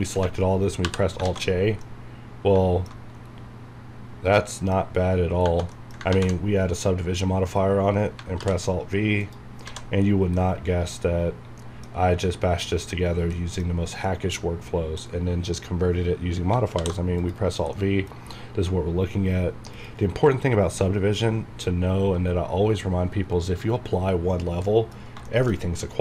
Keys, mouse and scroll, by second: 1.8-4.4 middle drag, 3.2 scroll down 1, 4.4 middle click, 5.4 Tab, 5.7 middle click, 6.1 ctrl+1, 8.4 alt+v, 9.2 click, 9.6 scroll down 1, 10.4-12.0 middle drag, 12.0 scroll up 1, 12.6 scroll down 1, 13.3 middle click, 13.7-14.0 scroll down 1, 14.0 middle click, 15.1 scroll up 1, 16.5 scroll up 1, 16.8 alt+v, 17.2 click, 17.7-19.7 middle drag, 19.7 click, 23.3 scroll up 1, 24.0-24.6 scroll down 1, 24.8 middle click, 25.5 scroll up 1.